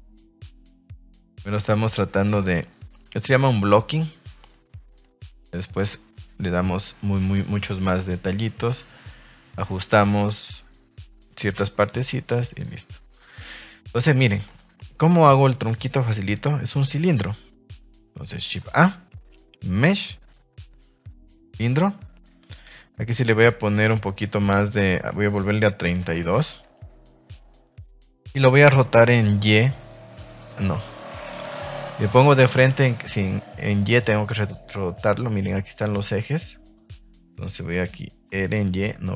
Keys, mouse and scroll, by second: 0.0 click, 1.5 click, 2.2 click, 2.6 click, 4.4 click, 5.8-6.9 middle drag, 7.4-8.9 middle drag, 12.4 shift+middle drag, 13.2 shift+middle click, 14.5 shift+middle click, 25.0-26.3 drag, 33.1 middle click, 37.0 middle click.